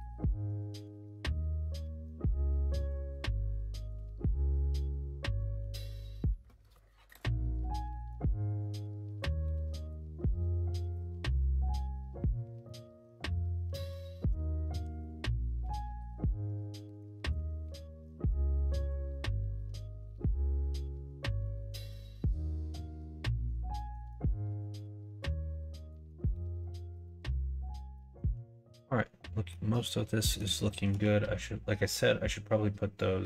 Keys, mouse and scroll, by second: 2.4 1, 3.0 click, 3.8 click, 5.5 ctrl+z, 6.0 ctrl+z, 8.3 shift+click, 9.2 middle click, 9.8 shift+middle click, 10.8 middle click, 11.2 shift+middle click, 12.5 middle click, 13.8 shift+click, 14.7 g, 17.2 click, 17.2 Tab, 18.0 middle click, 19.0 middle click, 19.4 shift+middle click, 20.5 middle click, 21.1 shift+middle click, 21.4 middle click, 21.8 shift+middle click, 22.4 middle click, 23.2 middle click, 23.6 shift+middle click, 25.8 shift+middle click, 26.5 middle click, 26.9 shift+middle click, 27.8 shift+middle click, 29.4 middle click, 30.1 middle click.